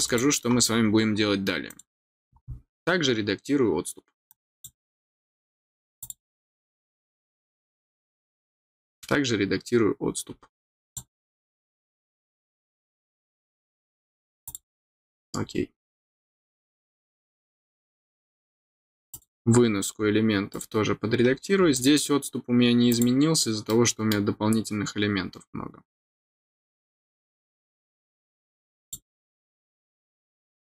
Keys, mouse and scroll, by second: 0.0 click, 1.6 click, 4.2 click, 5.9 click, 8.6 middle click, 8.6 scroll up 1, 9.1 middle click, 9.1-9.6 scroll, 10.8 click, 14.4 click, 19.1 click, 19.6-20.1 scroll down 2, 20.5 click, 21.7 click, 22.8 click, 23.6 middle click, 28.8 click, 29.7-30.1 scroll down 2.